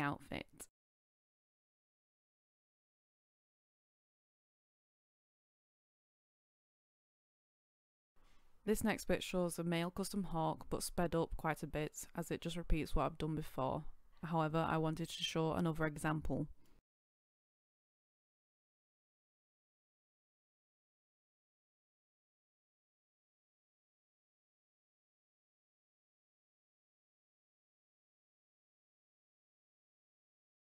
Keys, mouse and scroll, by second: 6.2 scroll up 1, 7.2-7.6 scroll down 1.